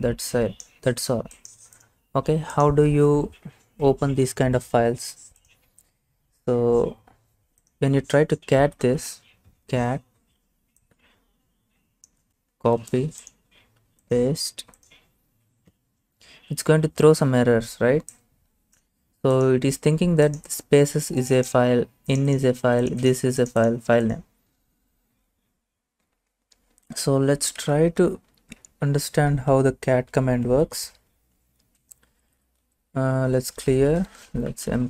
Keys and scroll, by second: 8.3-9.4 typing, 12.8 ctrl+c, 15.7 Return, 27.2-28.6 typing, 30.5 Return, 31.9-34.8 typing.